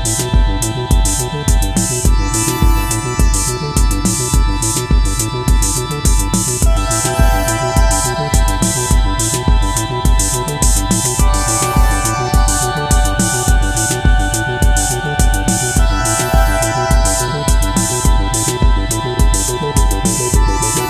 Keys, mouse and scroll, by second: 3.5 Return, 14.1 [, 15.5-17.2 typing.